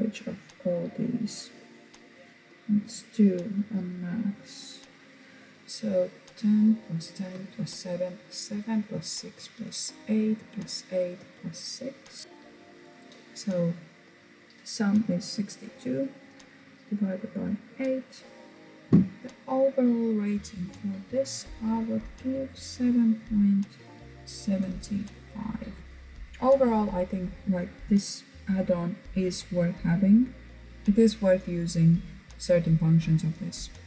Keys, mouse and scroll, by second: 19.8 click, 25.8-27.3 scroll down 2.